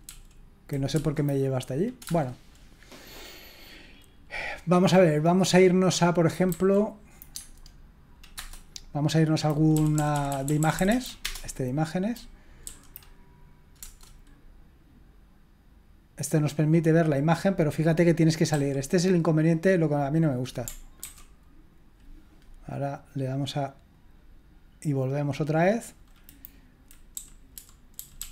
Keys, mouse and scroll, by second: 0.0 k, 0.9 Up, 2.0 Return, 6.5 Left, 7.3 Tab, 8.3 Return, 9.7 Up, 9.9 Up, 10.1 Up, 10.3 Up, 10.4 Up, 10.8 Up, 10.9 Up, 11.2 Return, 12.6 Down, 13.8 Return, 18.5 q, 21.0 ctrl+c, 23.9 click, 25.3 click, 27.1 Down, 27.5 Down, 27.9 Down, 28.2 Up.